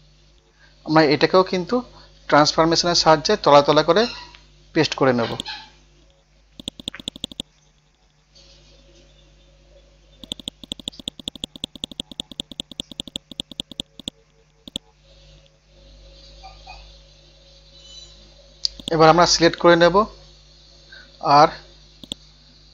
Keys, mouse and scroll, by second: 2.2 scroll down 1, 5.3 click, 7.7 scroll down 1, 9.1 scroll up 1, 10.2 click, 13.4 click, 15.3 scroll up 1, 16.2 scroll down 1, 17.2 scroll up 1, 17.8 scroll down 1, 18.8-21.5 drag, 21.5 scroll up 1, 22.0 right click.